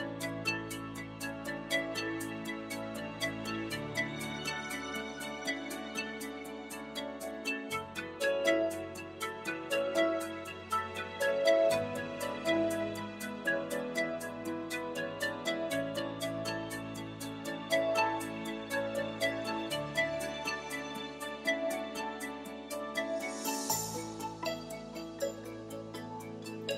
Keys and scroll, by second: 2.4-3.8 typing, 11.9 ., 12.9 0, 13.2 1, 20.2 0, 20.5 Return, 22.7-24.2 typing.